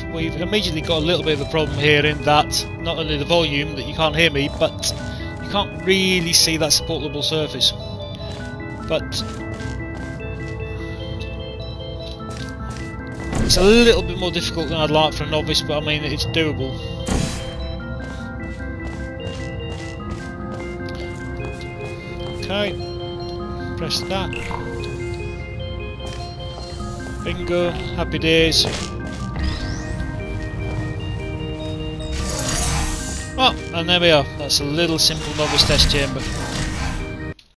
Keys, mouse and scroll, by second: 0.6 w, 4.3 d, 5.3 s, 8.1 w, 12.1 s, 13.2 right click, 13.6 s, 16.9 click, 17.8 w, 19.4 Caps_Lock, 19.4 w, 21.4 d, 21.9 w, 23.8 w, 24.2 e, 25.9 w, 27.8 w, 29.2 e, 30.1 w, 31.9 e, 32.9 w, 37.4 alt+F9.